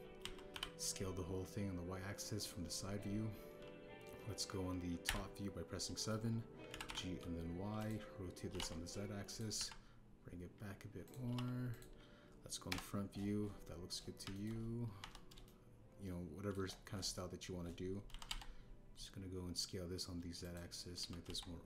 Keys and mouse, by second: 0.5 a, 1.1 s, 1.5 y, 3.3 click, 6.0 KP_7, 6.9 shift+middle click, 7.6 g, 7.8 y, 9.4 r, 9.5 z, 10.2 click, 10.5 g, 12.0 click, 12.2 r, 12.2 z, 12.6 click, 13.6 KP_1, 15.2 a, 15.3 click, 15.9 KP_1, 16.4 shift+click, 16.8 shift+middle click, 19.0 s, 19.2 z, 21.4 click.